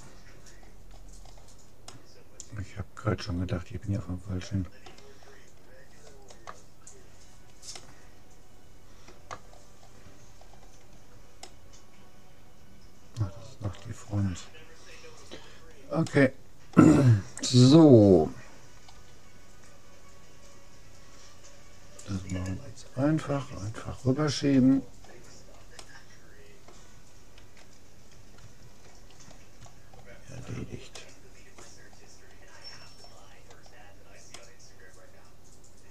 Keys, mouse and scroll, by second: 1.9-3.5 middle drag, 5.3-9.5 middle drag, 10.5-11.5 scroll down 1, 11.5-12.7 middle drag, 12.7 click, 14.1-16.1 middle drag, 16.1-17.9 drag, 18.9 g, 24.1-27.4 middle drag, 27.4 a, 28.1-31.3 middle drag, 32.7-35.9 middle drag.